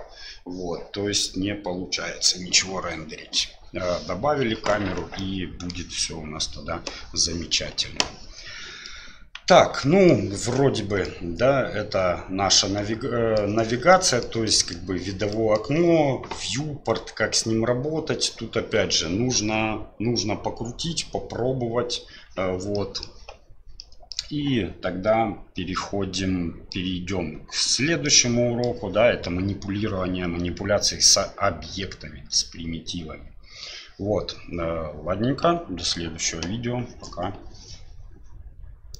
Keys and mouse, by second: 5.2 middle click, 8.8 middle click, 9.8 shift+middle click, 11.0-13.4 middle drag, 13.9 middle click, 14.4 middle click, 15.3 middle click, 22.7 middle click, 23.8 middle click, 26.1 middle click, 28.0 middle click.